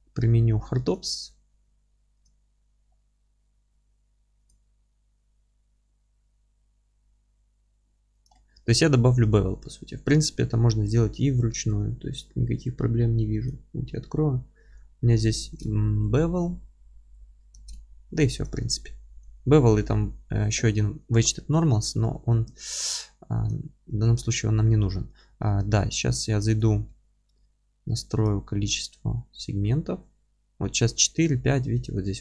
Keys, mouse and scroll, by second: 0.0 q, 2.8-3.4 scroll down 2, 3.4-3.9 scroll up 2, 3.9 q, 8.2 click, 8.4-8.7 scroll up 2, 8.7-15.4 alt+middle drag, 9.4-9.8 scroll up 2, 17.5 ctrl+space, 17.5-18.2 drag, 18.2-32.2 alt+middle drag, 20.5 Tab, 22.7-23.0 scroll up 2, 23.8 Tab, 26.1 q, 26.5 Tab, 28.2 q.